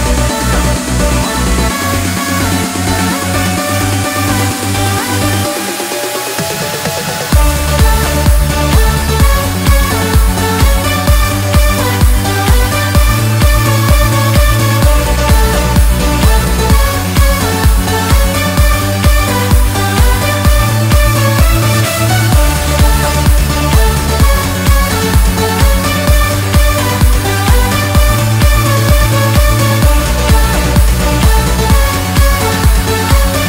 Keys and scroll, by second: 0.3 ctrl+e, 7.4 ctrl+d, 9.9 ctrl+j, 14.1 ctrl+j, 14.2 ctrl+e.